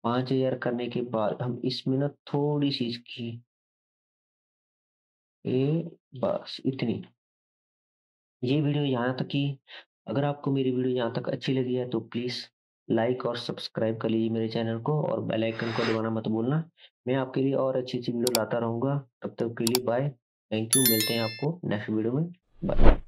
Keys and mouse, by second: 0.2-1.2 drag, 1.3-6.7 drag, 6.8 click.